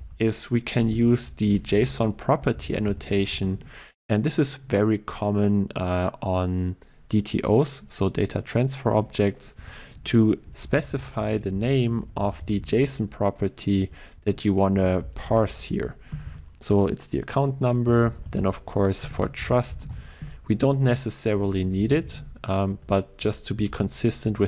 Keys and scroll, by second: 3.4 Return, 20.3 Return.